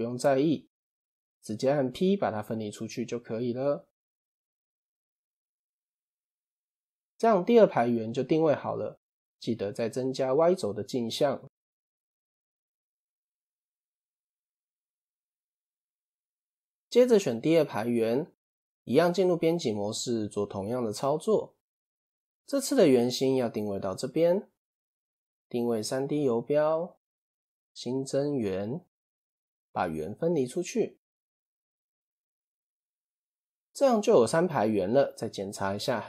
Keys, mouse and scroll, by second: 3.6 click, 4.5 click, 5.0 Tab, 5.7 click, 6.6 click, 11.1 click, 13.7 click, 16.2 click, 17.7 Tab, 18.6-20.1 scroll up 1, 20.4-23.3 shift+middle drag, 23.4 click, 25.0 shift+s, 27.7 shift+a, 30.1 p, 31.2-32.0 scroll down 2, 32.0 click, 32.8-33.2 shift+middle drag, 33.2 click.